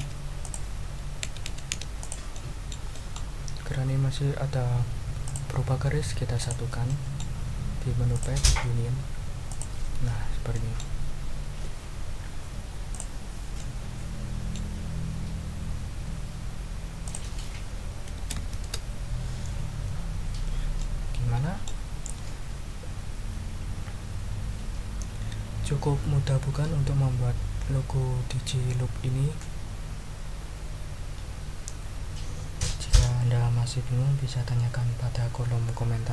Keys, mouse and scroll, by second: 0.4 click, 1.2 Left, 2.0 click, 2.4 click, 3.2 ctrl+click, 3.4-4.0 ctrl+scroll up 4, 5.2 click, 6.4 shift+click, 6.9 shift+click, 8.1 click, 9.5 click, 10.1-10.4 ctrl+scroll down 2, 10.5 ctrl+click, 12.9 click, 13.5-14.7 drag, 17.0 click, 18.1 BackSpace, 18.4 5, 18.6 Return, 20.8-21.8 drag.